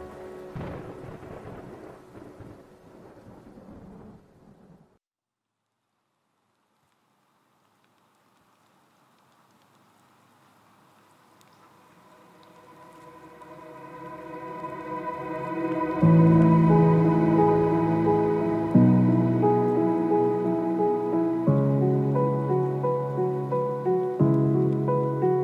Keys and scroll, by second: 3.7 shift+F8, 10.6 Return, 21.2 Return, 24.2 ctrl+KP_0, 24.5 ctrl+KP_Add.